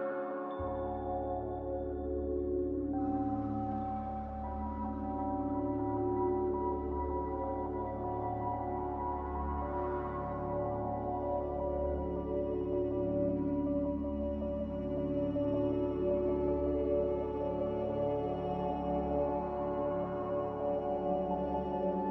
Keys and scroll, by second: 10.5 n, 13.7 z, 19.0 z, 21.1-21.9 typing.